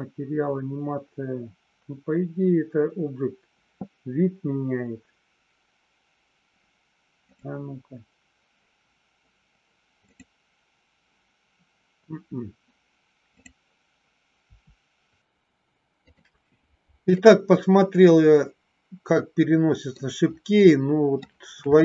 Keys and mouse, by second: 10.2 click, 15.2 a, 17.2-19.9 middle drag, 20.5 middle click, 21.6 shift+middle click.